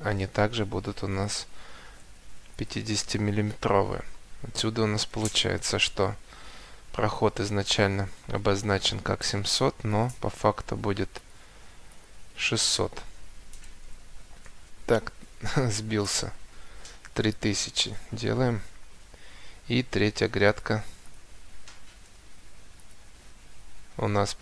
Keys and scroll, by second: 0.1 Escape, 4.8 7, 5.0 0, 5.5 Return, 8.6 Escape, 13.3 6, 14.9 0, 15.3 BackSpace, 16.7 3, 17.0 0, 17.9 Return, 18.9 Escape, 23.1 Escape.